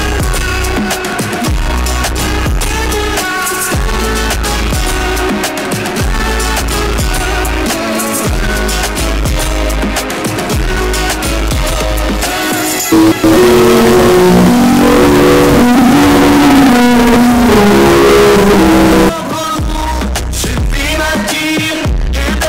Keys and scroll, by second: 0.3 Down, 0.5 Down, 1.6 Down, 2.0 Up, 2.1 Up, 2.4 Return, 19.5 Page_Down.